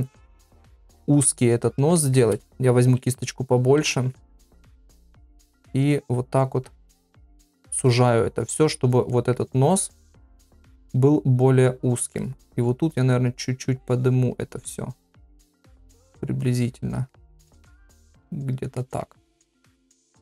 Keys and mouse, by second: 0.4 middle click, 1.6 click, 2.0 middle click, 2.4-2.8 ], 3.8 ], 3.8 [, 3.9 [, 4.5 click, 5.1 click, 5.7 click, 6.3 click, 6.9 click, 7.5 click, 7.8 middle click, 9.1 middle click, 10.0 click, 10.6 middle click, 11.4 click, 11.9 click, 12.2 middle click, 12.8 click, 13.3 click, 14.1 click, 15.2 middle click, 16.0 click, 17.1 middle click, 18.3 click, 18.8 middle click, 19.4-20.2 middle drag.